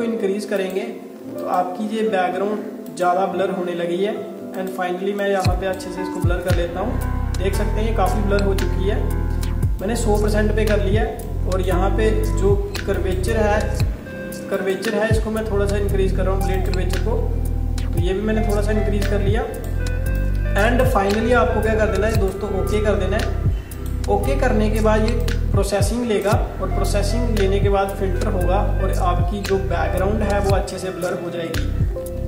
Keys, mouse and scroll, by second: 19.1 click, 32.1 ctrl+d.